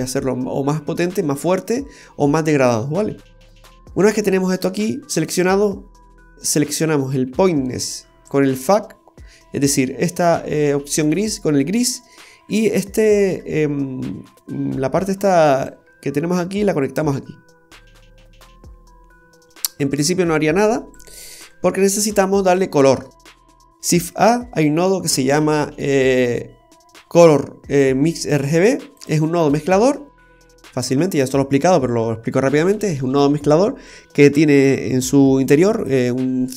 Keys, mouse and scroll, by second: 3.3 click, 3.9-4.3 scroll up 2, 4.2 middle click, 6.5 click, 12.7 scroll down 1, 12.8 middle click, 15.7 click, 20.9 click, 22.3-22.6 scroll down 2, 22.6 middle click, 23.9 shift+a, 29.0 typing, 30.3-30.8 scroll up 3, 35.7 click.